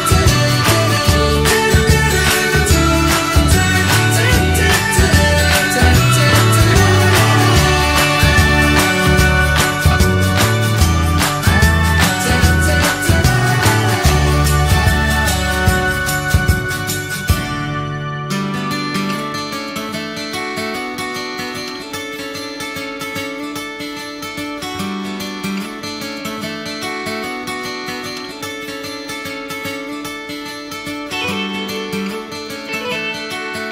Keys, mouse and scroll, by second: 0.7-2.2 scroll up 1, 2.2 ctrl+a, 3.9 shift+middle click, 4.5 click, 4.9 ctrl+a, 6.4-8.1 shift+middle drag, 8.1 click, 8.4 middle click, 9.0 ctrl+a, 10.0-12.9 middle drag, 12.9 Tab, 13.1 click, 13.4 shift+middle click, 13.9 alt+z, 14.1 click, 15.0 middle click, 15.7 click, 16.2 ctrl+1, 16.6 ctrl+2, 17.1 click, 17.8 scroll down 1, 18.0 middle click, 18.3 shift+click, 18.5-20.7 shift+middle drag, 20.7 click, 21.0 middle click, 21.4 click, 21.7 shift+middle click, 21.9 scroll down 1, 22.1-23.6 middle drag, 23.6 Tab, 23.9 middle click, 24.3 click, 24.7 middle click, 25.6 ctrl+a, 29.0 middle click, 29.8 click, 30.1-31.2 middle drag, 31.2 ctrl+a.